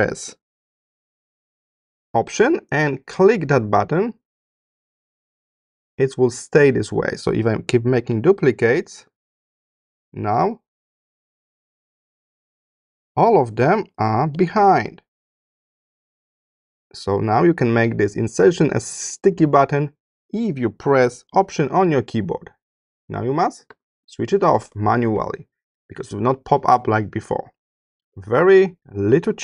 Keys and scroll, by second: 7.8 super+c, 10.0 super+v, 12.0 super+c, 13.2 super+v, 14.0 super+c.